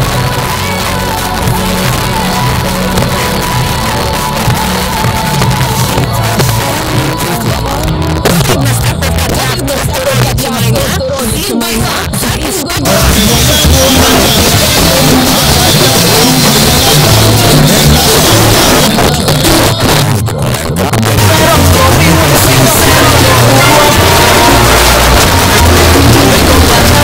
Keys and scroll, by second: 15.2 typing, 18.9 Page_Down, 23.5 typing.